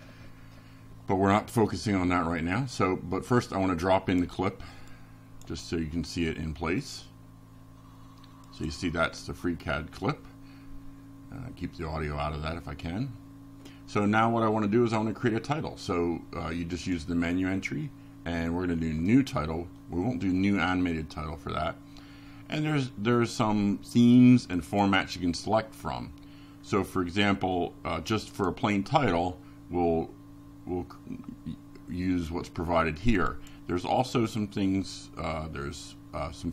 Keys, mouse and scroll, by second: 0.6 click, 8.2 click, 10.4 click, 19.0 click, 27.4 click, 29.1 click, 32.4-34.6 typing, 35.4 click.